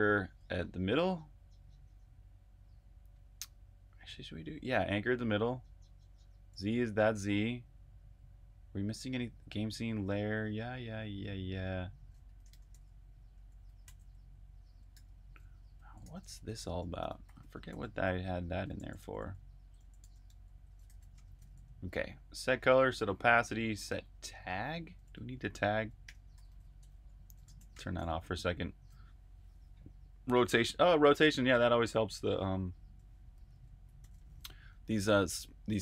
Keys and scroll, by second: 1.8-2.5 typing, 7.1 j, 12.2-23.2 typing, 24.6-28.4 typing, 33.9-35.8 typing.